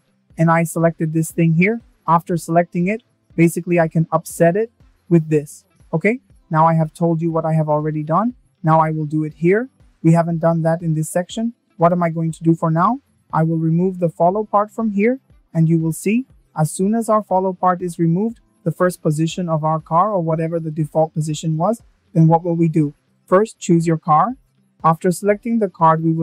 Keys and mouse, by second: 1.6-3.4 drag, 8.0 click, 9.4 click, 12.1 click.